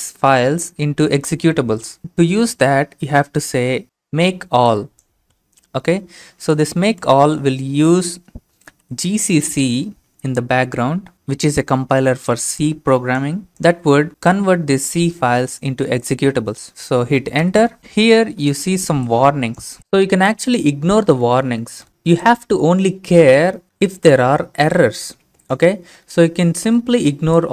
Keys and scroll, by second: 7.4 alt+Tab, 8.8 ctrl+v, 17.4 Return.